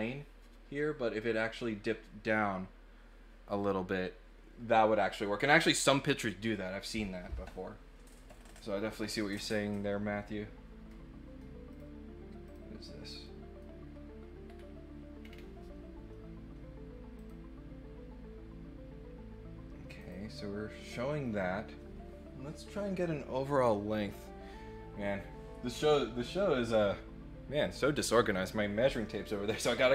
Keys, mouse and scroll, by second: 11.7 click, 12.4 click, 13.2 middle click, 14.4 scroll up 1, 15.2 scroll down 1, 17.1 click, 19.9 click, 20.8 middle click.